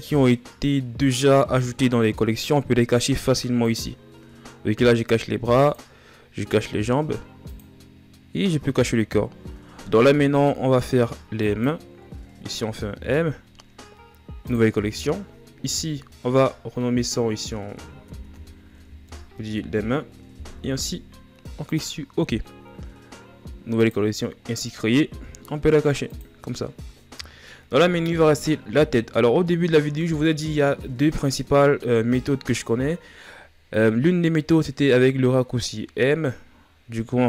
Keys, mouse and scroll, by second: 3.4-9.9 drag, 9.9-10.7 scroll down 6, 10.7 b, 12.6 m, 22.5-23.5 scroll down 4, 23.5-24.7 drag, 24.7 scroll down 3, 25.8-27.0 drag, 27.0-27.7 shift+scroll up 2, 27.7 shift+scroll up 8.